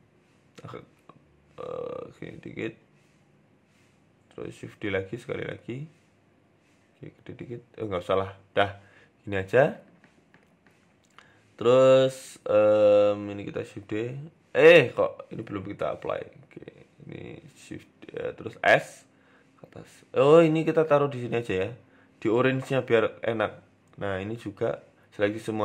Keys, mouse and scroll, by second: 0.5 r, 1.4 r, 2.3 shift+middle click, 2.7 z, 3.6 g, 4.6 shift+d, 6.4 s, 7.5 Tab, 7.6 scroll down 6, 7.8 middle click, 8.4-8.9 scroll up 3, 8.7 middle click, 8.9-9.4 scroll down 2, 9.1 middle click, 10.0 s, 11.5 shift+right click, 11.9 shift+middle click, 12.6 shift+d, 14.0 ctrl+j, 14.7 ctrl+z, 14.9 right click, 15.6 click, 16.1 shift+right click, 16.9 ctrl+j, 17.4 KP_1, 17.8-18.1 scroll up 3, 18.0 s, 18.8 g, 19.8 Tab, 20.1 a, 20.6 g, 21.7 Tab, 22.0 s, 22.6 g, 23.6 right click, 24.4 Tab, 24.7 a, 25.2 g.